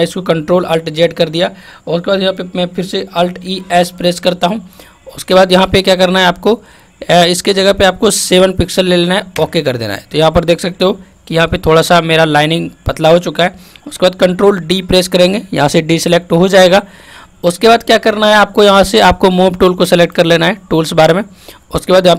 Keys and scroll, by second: 3.4 alt+e, 3.7 alt+s, 14.6 ctrl+d.